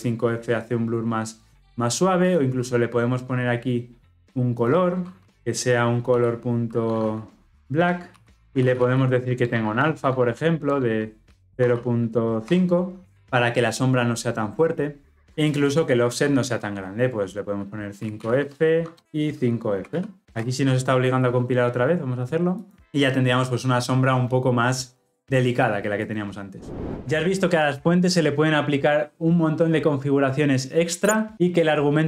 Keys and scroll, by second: 9.4 Return, 18.3 Tab.